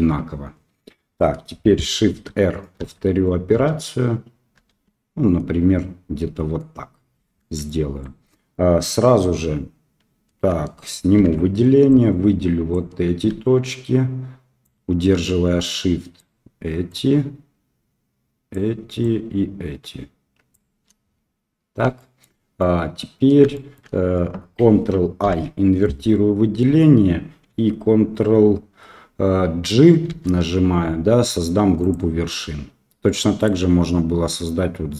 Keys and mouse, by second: 2.1 shift+r, 2.8 shift+r, 7.6 shift+middle click, 11.1 alt+a, 11.9 click, 14.7-16.1 shift+drag, 16.8-18.5 shift+drag, 19.0-20.5 shift+drag, 21.9 shift+middle click, 22.5 middle click, 23.5 shift+middle click, 25.2 ctrl+i, 30.0 ctrl+g, 33.3 click.